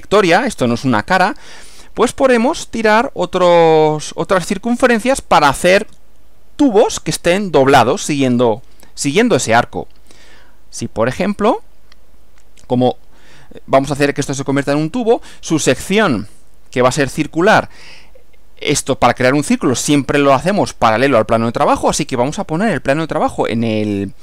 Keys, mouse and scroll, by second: 22.0 click, 23.6 click.